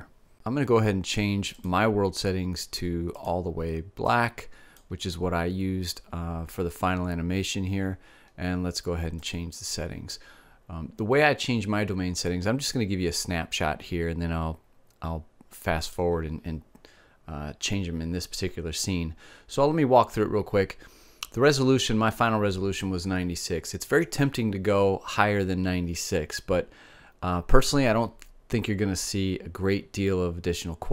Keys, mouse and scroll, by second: 2.6 click.